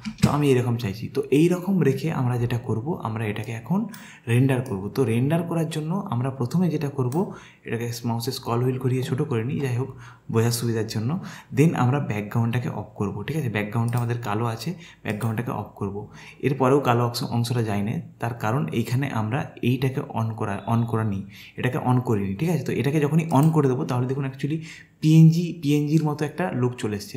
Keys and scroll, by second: 0.1 space.